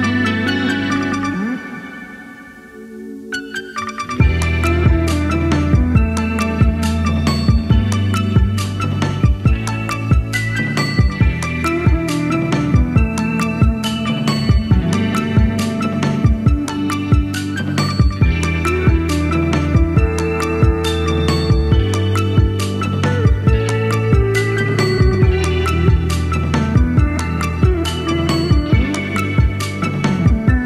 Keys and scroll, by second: 19.9-20.2 scroll up 1.